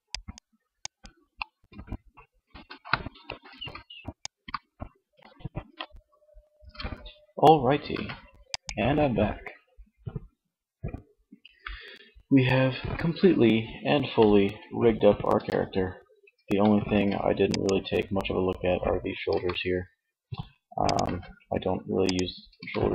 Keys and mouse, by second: 2.3 KP_1, 3.3 alt+r, 4.1 alt+r, 4.8 ctrl+z, 5.4 Tab, 5.6 Tab, 7.2 ctrl+s, 14.7 Tab, 15.6 Tab, 16.1 ctrl+Tab, 16.8-18.3 drag, 18.4 click, 18.6 r, 20.1-21.4 drag, 20.5 ctrl+z, 21.6-22.9 drag, 21.9 r.